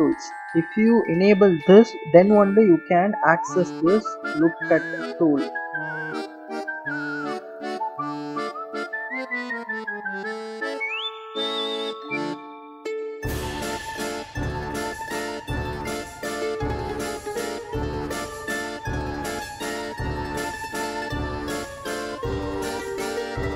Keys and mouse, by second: 3.5-6.8 right drag, 7.7 click, 8.1 s, 9.2 ctrl+z, 9.9 s, 12.1 click, 13.9 s, 14.6 click, 15.0 click, 15.8 click, 16.7 click, 17.5 click, 18.1 click, 18.9 click, 19.4 a, 19.7 click, 20.5 click, 21.3 click, 21.9 click, 22.2 a, 22.9 click, 23.2 click.